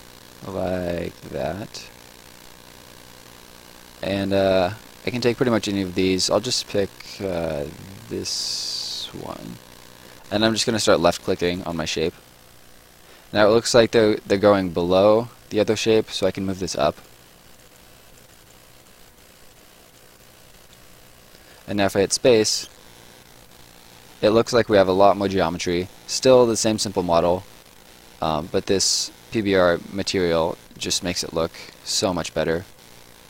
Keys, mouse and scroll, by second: 1.2 click, 9.0 click, 12.4 middle click, 16.6 click, 21.4 click, 22.1 space, 23.2 right click, 26.6 right click, 28.7 right click, 30.6 middle click, 31.1 right click.